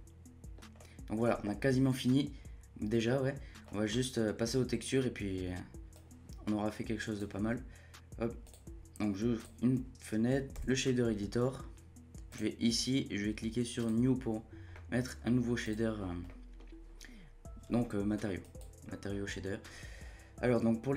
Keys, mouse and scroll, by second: 1.9-3.3 scroll down 1, 3.3-5.9 scroll down 1, 5.9-10.5 drag, 10.5 n, 12.3-14.7 drag, 14.7 middle click, 15.6-16.0 drag, 16.0 scroll up 1, 16.3-18.4 middle drag, 18.4-18.9 drag, 18.9-20.9 middle drag.